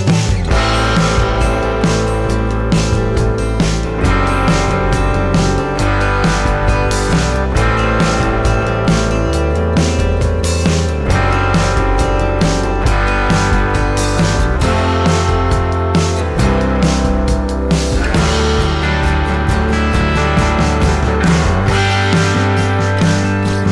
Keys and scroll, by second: 9.6 ctrl+alt+s.